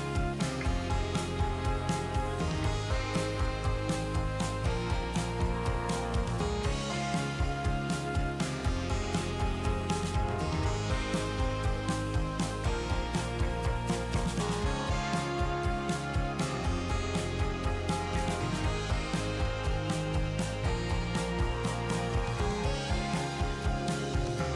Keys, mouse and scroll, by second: 2.2 click, 6.2-11.1 drag, 12.2 click, 15.2-18.0 drag, 19.3-23.4 drag.